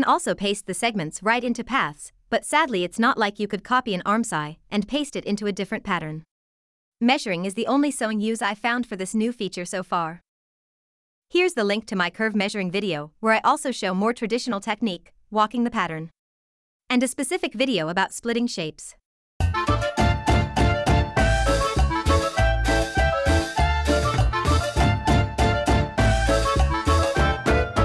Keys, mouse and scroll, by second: 0.2 ctrl+v, 2.1 click, 5.1 ctrl+v, 7.7 scroll, 11.4 ctrl+v, 14.2 click.